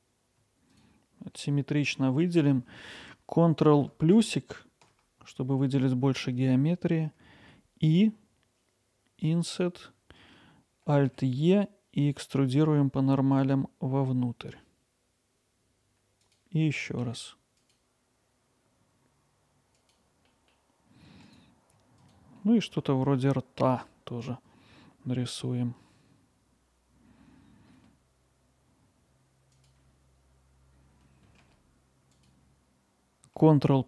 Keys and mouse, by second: 4.2 ctrl+KP_Add, 7.4 i, 11.1 alt+e, 16.2 click, 17.0 alt+e, 19.8 click, 21.3 click, 27.1 i, 28.5 alt+e, 29.4 click, 29.5 alt+e, 30.2-30.7 drag, 33.2 ctrl+KP_Add, 33.2 ctrl+z.